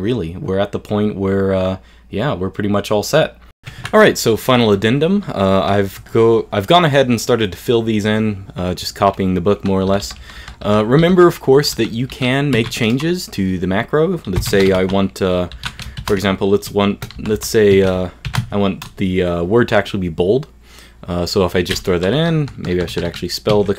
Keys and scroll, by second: 1.4 super+f.